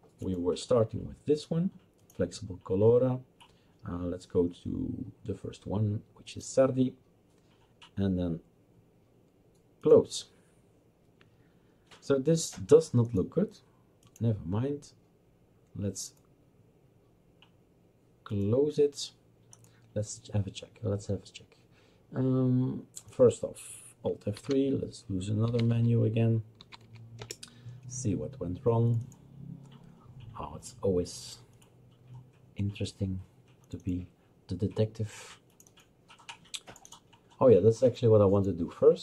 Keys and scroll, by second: 24.4 alt+F3, 25.2-27.1 typing, 27.2 Return.